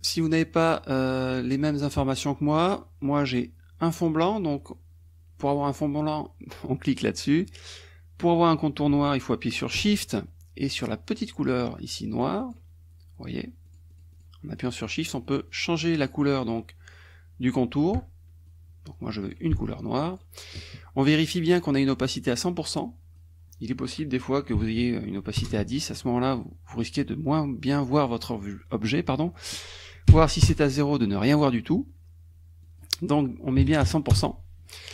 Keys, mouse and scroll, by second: 12.6 shift+click, 13.3 shift+click, 13.7 shift+click, 14.7 shift+click, 15.1-16.7 shift+drag, 18.5 shift+click, 20.2 shift+click, 22.7 click, 25.4 Return, 29.4 click, 30.1 KP_0, 30.5 Return, 32.6 click, 33.6 KP_1, 33.8 KP_0, 34.1 Return.